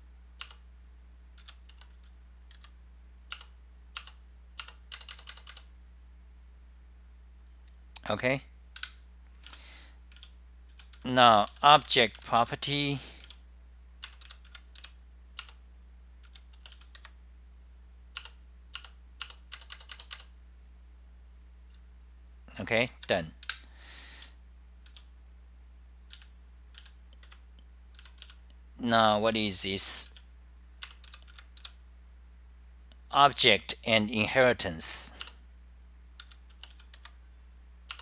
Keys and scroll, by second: 0.0-0.4 typing, 0.6 Return, 1.5 Home, 3.5 Up, 3.5 Return, 4.1 Return, 4.7 Return, 4.9-5.6 typing, 8.1-9.6 typing, 11.3-13.3 typing, 14.3 F10, 14.5 Home, 14.7-17.2 typing, 15.5 Return, 17.4 Delete, 18.3 Return, 18.8 Return, 19.3 Return, 19.4-20.2 typing, 21.9-24.3 Right, 22.7-30.4 typing, 23.5 super+w, 31.3 Home, 33.6-34.3 typing, 35.4 Return, 36.2 Home, 36.6-37.3 typing.